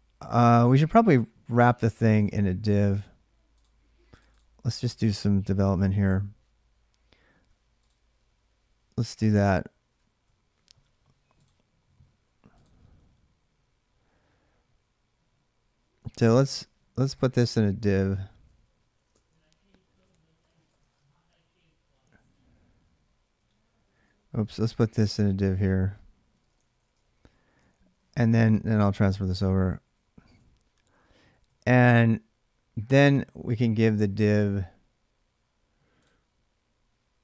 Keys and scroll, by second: 17.9 Return, 18.9-20.7 typing, 21.2 Down, 21.4 Down, 22.2 Down, 22.5 Down, 22.6 Down, 23.2 Up, 23.3 Up, 23.6 Up, 26.1-27.6 typing, 28.3 Down, 28.5 Down, 29.3 Left, 29.5 Left, 30.3-31.1 typing, 31.1 Up, 31.3 Up.